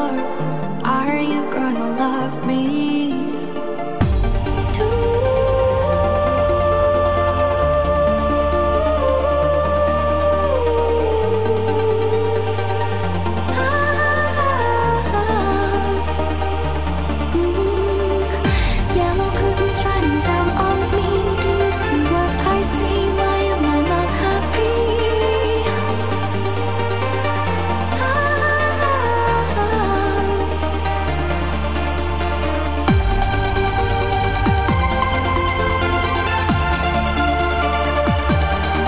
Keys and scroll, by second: 0.6 q, 5.4 w, 9.3 w, 12.7 w, 14.6 q, 18.2 q, 23.2 w, 24.2 q, 25.8 w, 30.7 x, 31.1 q, 32.7 w, 34.1 q, 36.2 q.